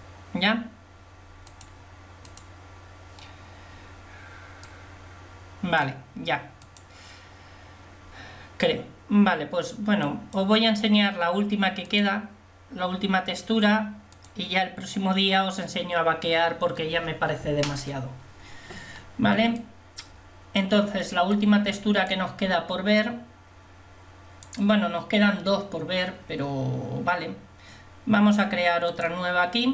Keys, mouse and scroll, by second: 29.1 click.